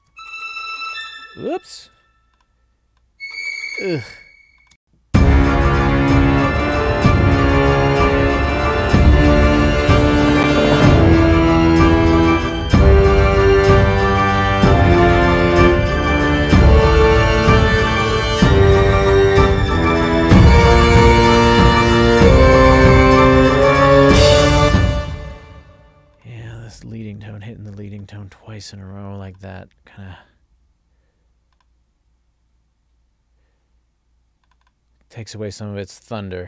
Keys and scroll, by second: 0.0 alt+shift+Up, 1.9 super+z, 4.9 space, 24.6 space.